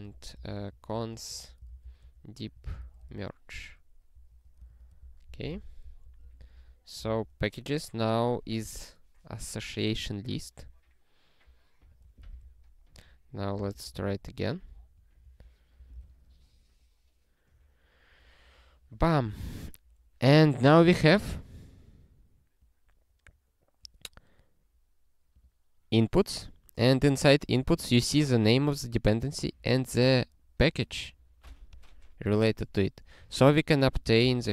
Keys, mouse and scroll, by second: 0.0-3.6 typing, 4.1 ctrl+f, 4.7 alt+shift+s, 5.0 ctrl+n, 5.3 ctrl+e, 5.8 ctrl+p, 6.0 ctrl+p, 6.2 ctrl+p, 6.4 ctrl+p, 6.6 ctrl+p, 7.1 ctrl+e, 11.9 click, 12.4 ctrl+e, 13.4 click, 13.9 ctrl+e, 15.2 ctrl+n, 15.8 ctrl+n, 16.1 ctrl+e, 33.7 click, 34.2 Return.